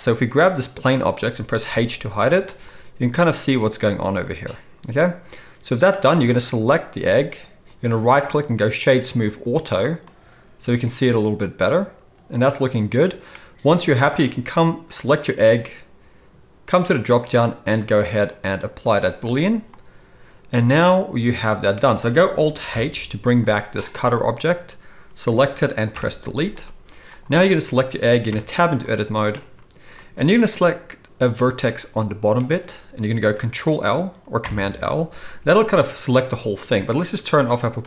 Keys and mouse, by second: 0.7 middle click, 0.8-10.7 right drag, 1.6 h, 2.1 z, 6.1-6.9 drag, 6.1-6.9 middle drag, 10.7-15.0 middle drag, 14.9 click, 14.9-16.8 right drag, 16.8-23.9 middle drag, 22.7 alt+h, 23.9 drag, 24.1-30.2 middle drag, 25.9 Delete, 28.3 Tab, 30.2-36.2 right drag, 34.4 ctrl+l, 35.5 g, 36.2-37.8 middle drag, 37.8 click.